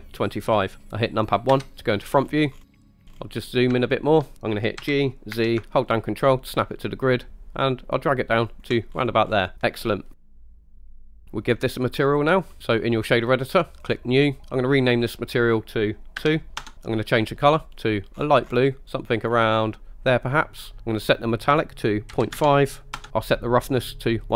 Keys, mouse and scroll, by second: 1.5 KP_1, 2.2-3.4 scroll up 11, 2.9 shift+middle click, 3.1 ctrl+shift+right click, 3.9-4.3 shift+middle drag, 4.8 g, 5.4 z, 8.5 ctrl+click, 9.0-9.6 scroll down 4, 10.1-10.4 middle drag, 10.4-10.9 scroll down 5, 11.1 scroll up 2, 12.0 click, 13.9-14.3 drag, 14.8-16.6 drag, 17.7 click, 21.0-23.0 drag, 23.8 click.